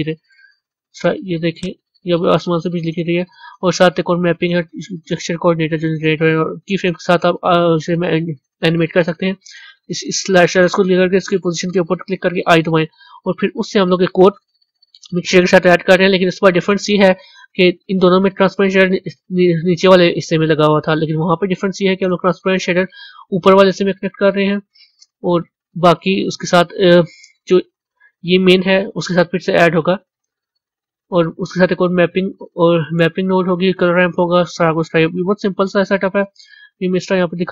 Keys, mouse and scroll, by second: 1.5-37.5 drag.